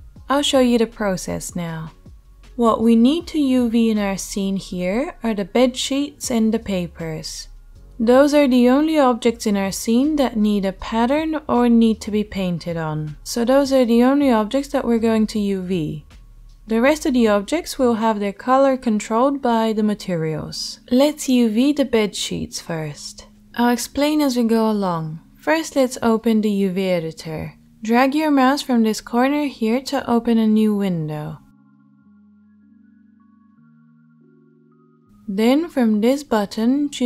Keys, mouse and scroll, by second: 0.0-29.4 middle drag, 29.4-37.0 drag.